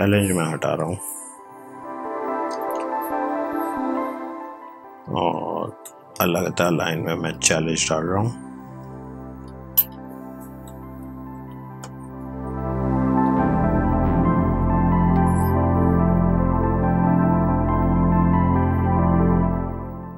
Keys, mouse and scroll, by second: 1.7 ctrl+x, 3.1 BackSpace, 7.2 click, 8.7 ctrl+v, 11.2 ctrl+t, 12.9 click.